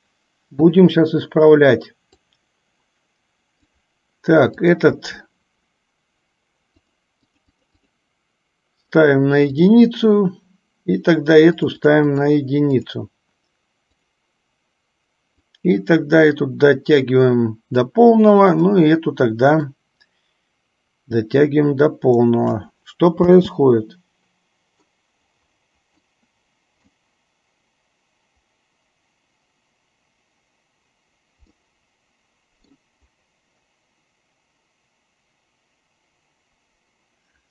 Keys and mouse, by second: 2.2-3.8 drag, 4.9 click, 7.0 click, 7.4 click, 11.7 click, 12.3 click, 14.2 click, 15.5-17.8 drag, 19.8-22.6 drag, 23.3 space, 26.2-27.1 middle drag, 31.7-33.0 middle drag.